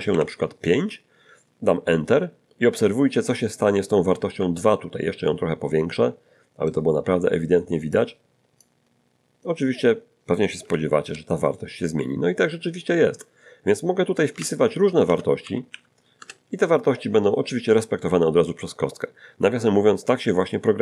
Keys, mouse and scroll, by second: 0.1 5, 4.5-5.5 ctrl+middle drag, 5.5-6.8 ctrl+drag, 7.9 click, 9.3 scroll down 2, 11.0 Return, 14.3 Up, 15.1 BackSpace, 15.4 -, 15.7 3, 16.2 Return.